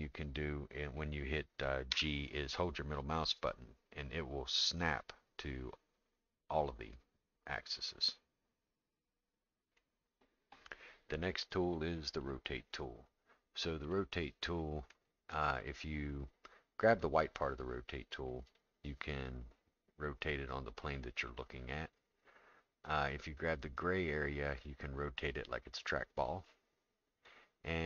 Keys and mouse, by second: 1.9 g, 12.2 click, 13.9 middle click, 18.5-21.0 drag, 23.6-27.3 drag.